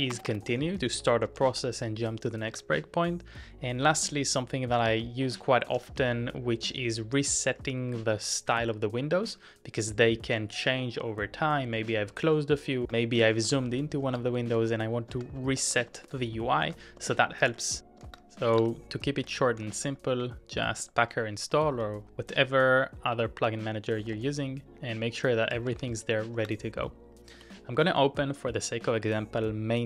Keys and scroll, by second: 0.0-1.8 typing, 2.5 ctrl+c, 3.9-6.4 typing, 7.6 shift+v, 8.1 shift+v, 9.2 j, 10.4 shift+v, 11.8 shift+v, 12.9 ctrl+w, 13.4 ctrl+w, 14.1 ctrl+w, 14.6-22.0 typing, 15.1 ctrl+w, 15.6 ctrl+w, 16.0 ctrl+w, 16.6 ctrl+w, 17.1 ctrl+w, 18.1 ctrl+w, 18.5 ctrl+w, 23.9-26.4 typing, 27.4 Return.